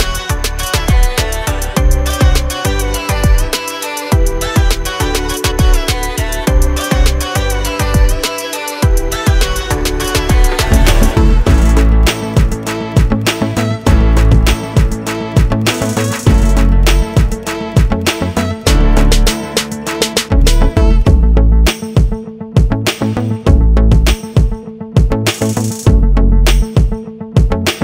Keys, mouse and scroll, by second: 1.4 F4, 6.7 click, 9.4 click, 9.8 double click, 10.5 click, 11.8 click, 13.1 click, 14.4 click, 15.1 scroll up 1, 17.0 click, 18.6 click, 20.6 click, 21.9 click, 26.8 click, 27.5 scroll down 1.